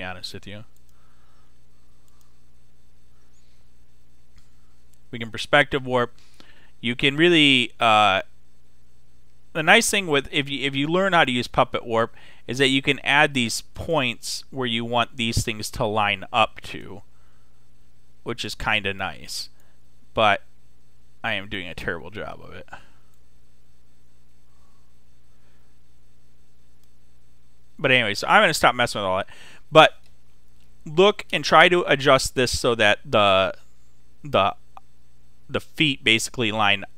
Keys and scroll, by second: 28.4 super+z.